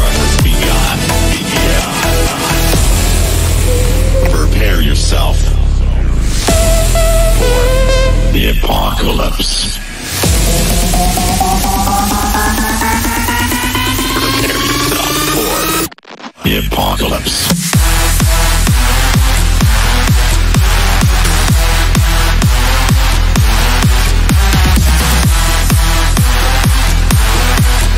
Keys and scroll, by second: 2.2 F3, 21.6 F3.